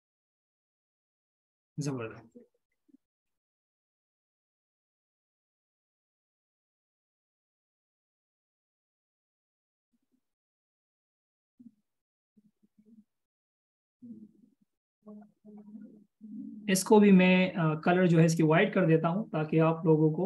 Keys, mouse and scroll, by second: 10.5 alt+shift+click.